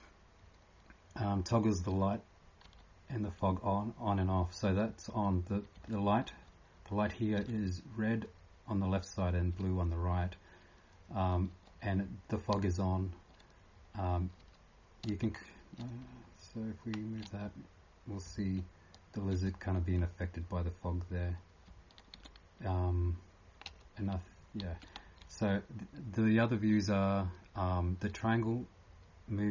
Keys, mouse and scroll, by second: 12.9-14.4 typing, 15.6-18.7 typing, 24.6-29.5 typing.